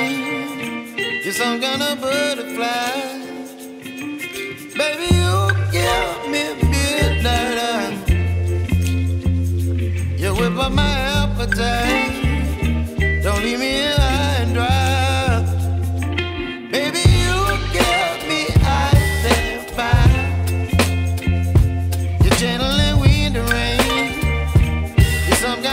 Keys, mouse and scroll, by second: 7.7-9.0 drag, 14.8-16.0 drag, 17.2 click, 17.6 shift+a, 24.6 middle click, 25.6-25.7 drag.